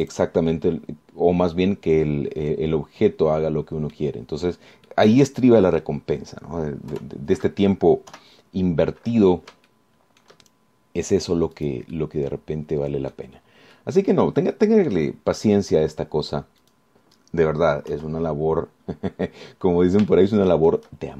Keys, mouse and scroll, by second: 1.3 click, 1.7-5.3 drag, 5.5-5.9 scroll down 1, 6.1-7.2 drag, 7.3 scroll up 1, 8.1 KP_3, 9.3 KP_1, 10.9 shift+middle click, 11.7-12.1 shift+scroll up 3, 12.8 click, 13.1-14.5 middle drag, 14.9 middle click, 15.6 click, 17.9 click, 19.1 KP_1, 20.6-20.9 scroll up 2.